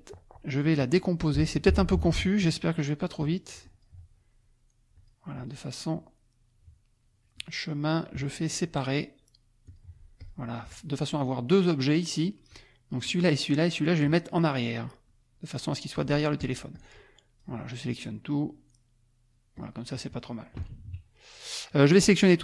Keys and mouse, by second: 1.5 click, 3.7 click, 5.0 click, 5.3 click, 7.4 click, 9.7 click, 10.2 click, 10.7 click, 12.5 click, 13.0 click, 15.1 click, 16.4 click, 16.7 click, 17.9-19.8 drag, 20.6 KP_Subtract, 21.4 click, 22.0 click.